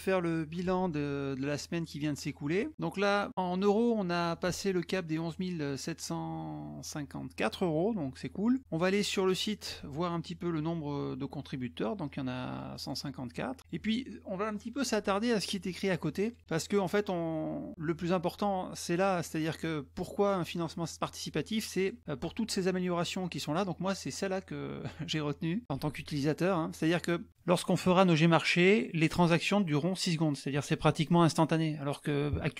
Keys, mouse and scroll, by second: 3.5 click, 9.3 alt+click, 12.0 click, 12.8 click, 12.9 click, 13.6 click, 15.3 scroll down 2, 16.1 click, 16.7 scroll down 2, 20.2 scroll up 2, 21.7 click, 22.6-25.6 drag, 29.7 click, 31.4 click.